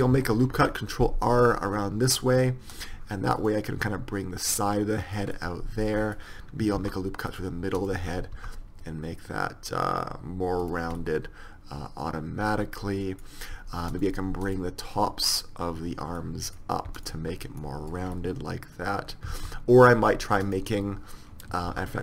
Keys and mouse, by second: 0.6 ctrl+r, 3.4-5.2 drag, 5.8 middle click, 6.8 ctrl+r, 8.4 s, 11.0-13.0 middle drag, 14.0-17.0 right drag, 17.6-19.0 middle drag, 19.4 ctrl+z, 21.7 ctrl+r.